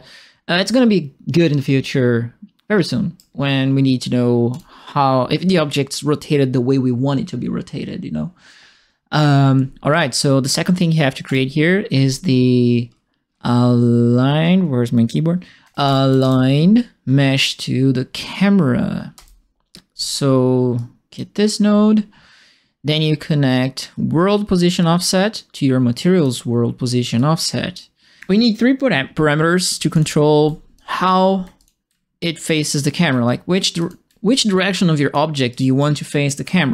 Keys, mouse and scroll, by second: 2.7 right click, 4.5 click, 9.9 right click, 11.2 right click, 15.3-16.6 typing, 20.7 click, 24.8-26.2 drag, 27.1-28.2 drag, 29.6 3, 29.9 click, 30.7 click, 31.4 3, 31.5 click, 32.2 click, 33.0 3, 33.7 click, 34.3 click, 35.5 click, 35.7 right click.